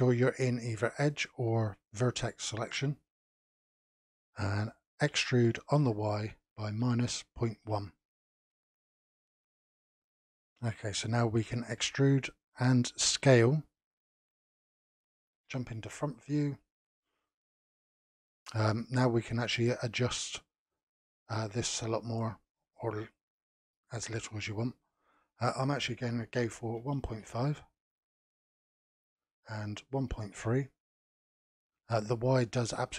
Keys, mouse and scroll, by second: 1.0 click, 1.9 click, 3.4 click, 3.9-5.1 middle drag, 5.1 e, 9.4-9.9 scroll down 1, 9.9-11.8 middle drag, 11.8 e, 15.4 KP_1, 16.3 KP_Decimal, 20.6-23.6 drag, 25.4-28.4 drag, 28.9-31.4 drag, 32.3-32.9 drag.